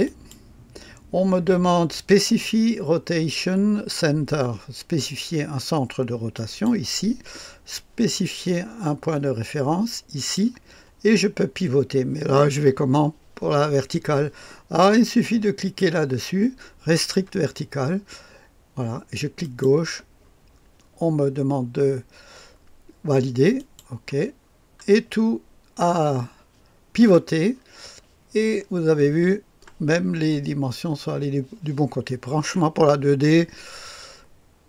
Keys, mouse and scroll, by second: 6.2 click, 10.1 click, 16.8 click, 19.3 click, 23.5 click, 24.3-25.4 scroll down 1, 26.1 middle click, 27.5-28.9 scroll up 1.